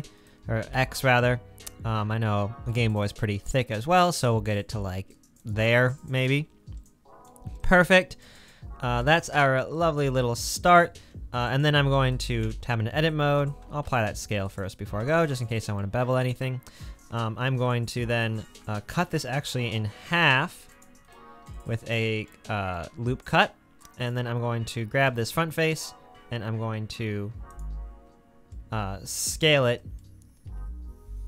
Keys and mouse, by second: 0.7 s, 8.1-10.0 middle drag, 10.0 click, 12.5 Tab, 13.5 Tab, 13.7 ctrl+click, 13.8 ctrl+a, 15.1 Tab, 16.1 click, 19.1 ctrl+r, 19.3-21.1 drag, 25.1 3, 27.5 middle click, 27.7 middle click.